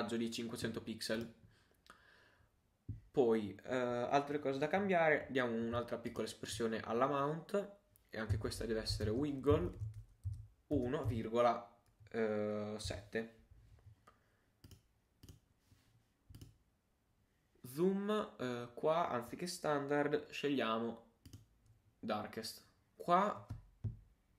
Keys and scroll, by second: 9.5 shift+e, 10.3 shift+Left.